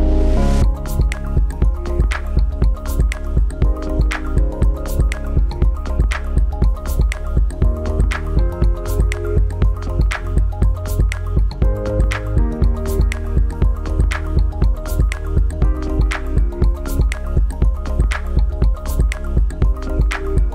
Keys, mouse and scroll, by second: 1.6 click.